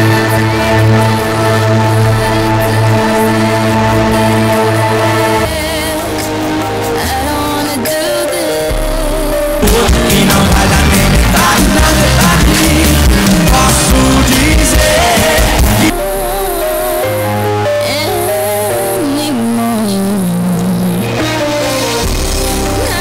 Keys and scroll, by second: 5.3 Page_Down, 15.9 Page_Down.